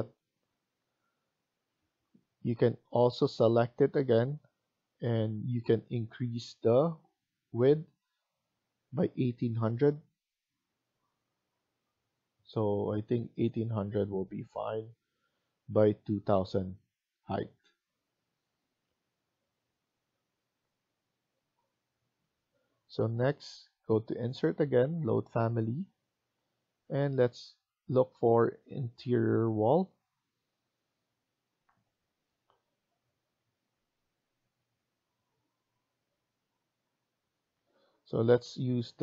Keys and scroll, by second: 0.7 Escape, 1.0 Escape, 18.4 Escape, 28.6 Down, 28.9 Down, 29.3 Down, 30.6 Down, 32.9 Up, 33.2 Up, 33.6 Down, 34.6 Down, 35.7 Up, 36.7 Down, 36.9 Down, 37.1 Down, 37.9 Up.